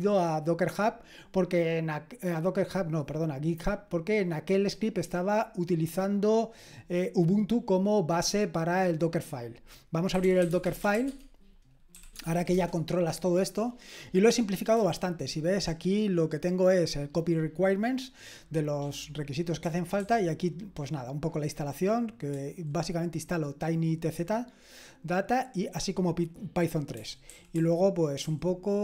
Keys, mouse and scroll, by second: 10.0-12.4 typing, 12.5 Return, 15.4 typing, 20.0 typing, 27.3-28.2 typing.